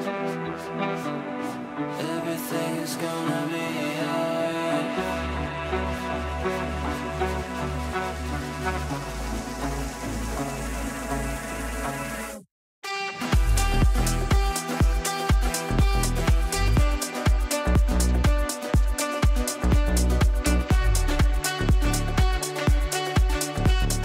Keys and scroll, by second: 8.1 Delete, 14.1 ctrl+g.